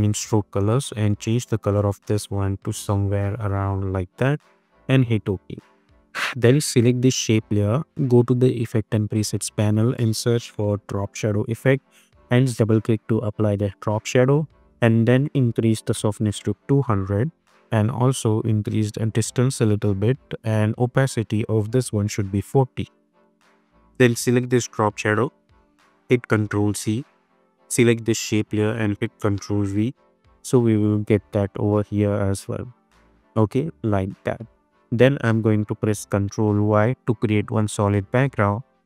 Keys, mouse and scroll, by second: 4.7 Return, 6.3 click, 9.5 ctrl+a, 10.1-11.5 typing, 12.9 click, 16.4 Return, 18.1-19.6 drag, 22.3 Return, 24.8 click, 26.6 ctrl+c, 27.5 click, 28.1 ctrl+v, 30.2 space, 34.2 click, 35.3 ctrl+y, 38.0-38.6 drag.